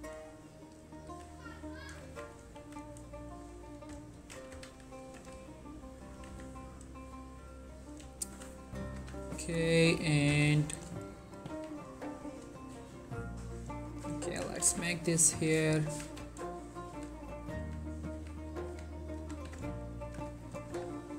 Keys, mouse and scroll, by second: 0.6-1.2 scroll up 2, 1.2-2.7 typing, 1.9 click, 3.4 click, 4.3 ctrl+z, 4.6-5.1 typing, 6.1 click, 6.4 z, 8.3 shift+middle click, 9.1 z, 10.4 typing, 10.8 shift+middle click, 11.1 click, 11.6 z, 12.7 s, 13.6 click, 14.5-20.8 typing, 15.3 click, 16.9 click, 19.9 click, 20.5 shift+scroll down 1, 20.5 shift+middle click.